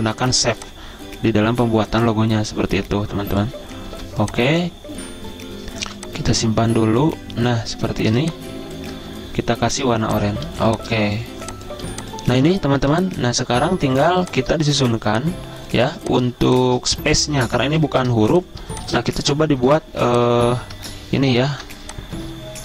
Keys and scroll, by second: 0.0-1.1 typing, 4.3 c, 6.2 v, 8.5 r, 10.8 z, 12.2-13.6 typing, 15.0 v, 16.3-17.3 typing, 18.0 ctrl+g, 19.2-20.0 typing, 21.8 o.